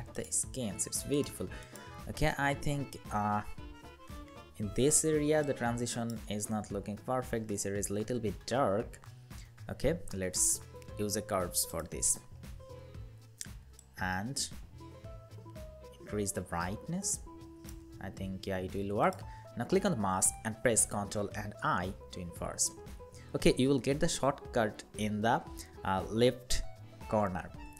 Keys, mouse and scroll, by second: 1.3 double click, 4.0 ctrl+=, 4.9 space, 21.4 ctrl+i.